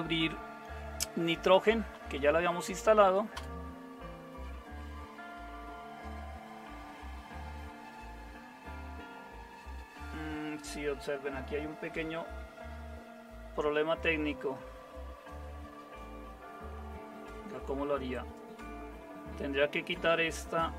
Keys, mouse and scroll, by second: 1.3-2.4 typing, 3.3 Return.